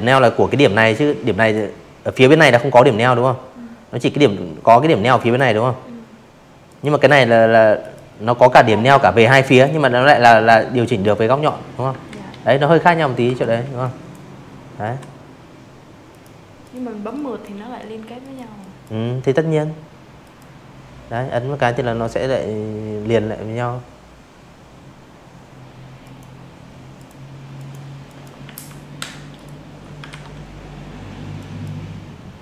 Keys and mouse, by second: 2.1 click, 3.6 click, 4.0 click, 4.8 click, 6.2 click, 8.0 click, 9.1 ctrl+z, 9.5 ctrl+z, 10.2 v, 10.6 a, 10.7 click, 13.0 click, 13.6 click, 14.1 click, 15.1 click, 15.5 click, 17.2 click, 23.0 click, 23.9 click, 24.5 click, 25.0 click, 25.3 a, 26.3 click, 27.1 ctrl+z, 28.3 click, 31.0 click, 32.0 click.